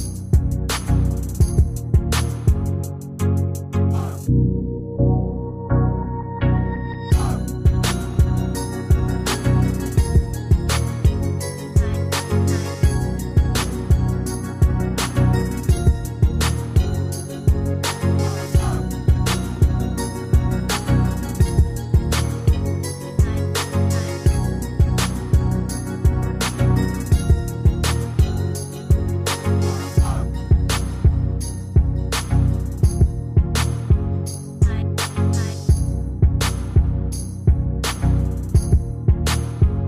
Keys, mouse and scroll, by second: 1.5 ctrl+d, 3.7 ctrl+d, 5.2 ctrl+d, 10.8 shift+click, 11.9 shift+click, 14.0 ctrl+g, 15.1 ctrl+shift+], 30.1 Escape, 30.9 ctrl+scroll down 1, 34.4 ctrl+g, 35.3 shift+click.